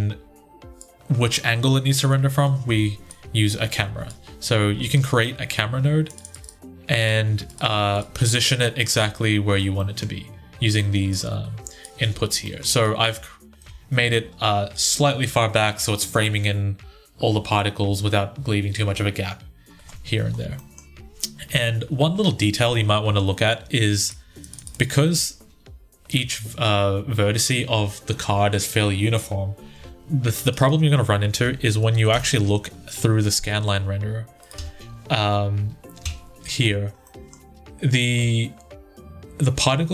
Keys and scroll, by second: 4.5 ctrl+z, 11.9 ctrl+z, 31.2 typing, 31.9 Return, 34.3 1, 35.8 Tab.